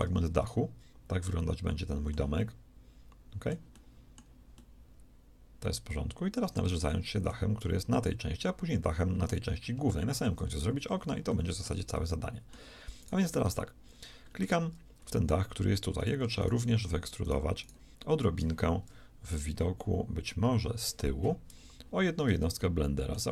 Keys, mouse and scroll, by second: 0.0 Tab, 13.4 Tab, 20.4 ctrl+KP_1.